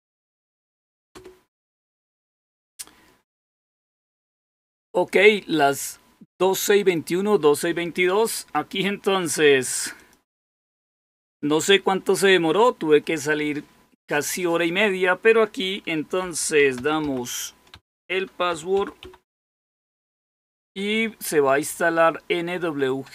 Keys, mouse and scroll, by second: 0.0-1.2 typing, 9.9 click, 16.2-19.9 typing.